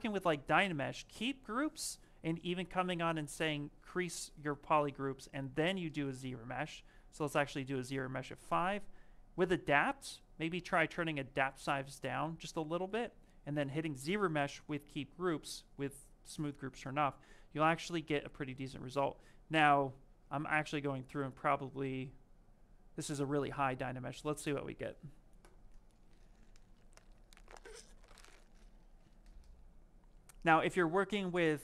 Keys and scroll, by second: 0.5 shift+f, 4.3 shift+f.